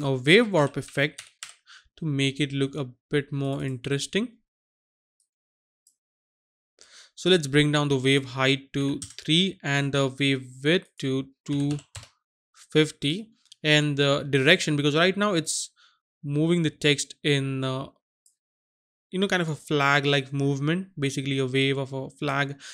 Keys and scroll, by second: 0.8-1.3 typing, 8.8 KP_3, 11.6 KP_2, 11.9 KP_0.